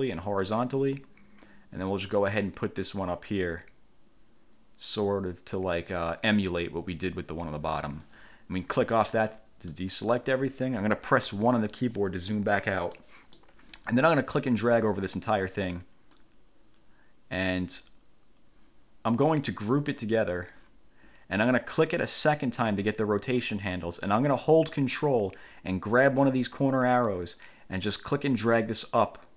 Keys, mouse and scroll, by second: 0.4 click, 1.6-7.9 drag, 8.2 click, 9.1 click, 9.8 middle click, 11.4 1, 13.1 middle click, 14.6-16.5 drag, 20.0 click, 22.6 click, 27.3-29.3 ctrl+drag.